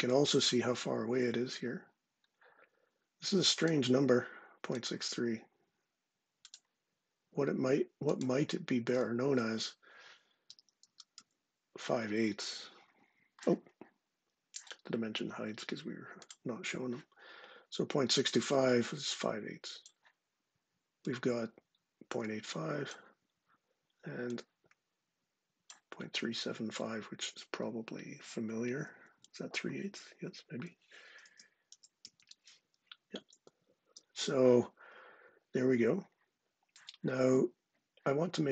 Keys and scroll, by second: 9.9-11.0 typing, 15.1 typing, 30.9 super+space, 31.1-32.7 typing.